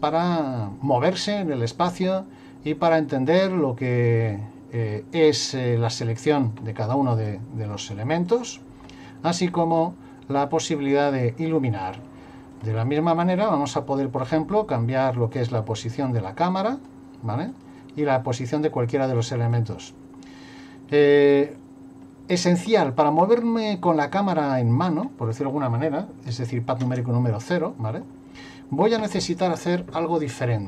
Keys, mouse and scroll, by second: 7.2 click, 9.3-10.2 scroll down 1, 10.8 click, 12.6 click, 13.2 right click, 14.2 click, 16.0 right click, 18.4 right click, 19.1 click, 22.8 click, 26.8 KP_0.